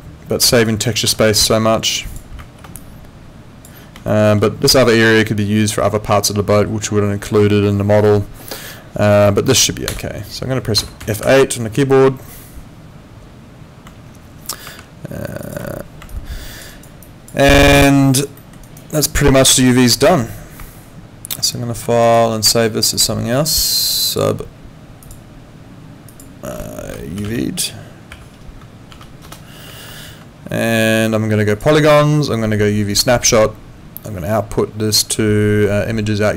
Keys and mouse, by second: 15.5 alt+click, 16.1 alt+click, 16.7 alt+right click, 17.0 alt+click, 17.4 alt+middle click, 17.7 alt+click, 18.4 alt+middle click, 18.6 alt+right click, 18.9 alt+click, 19.6 alt+middle click, 19.9 alt+right click, 22.0 click.